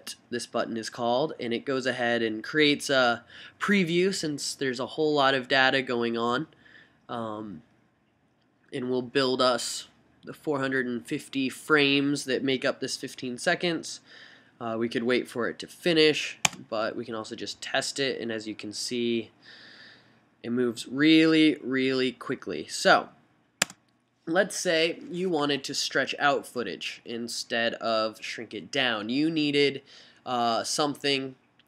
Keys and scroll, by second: 16.6 s, 23.8 s.